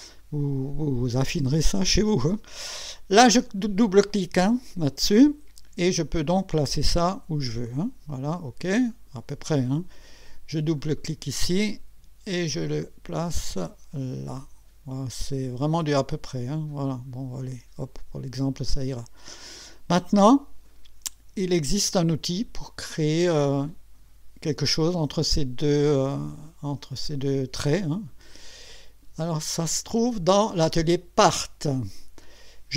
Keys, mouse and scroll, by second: 1.6 click, 4.7 click, 6.2-8.0 drag, 8.9 click, 10.8 click, 12.4-16.8 drag, 17.8 click, 18.6-19.7 drag, 22.0-22.6 drag, 29.6 click, 30.8 click.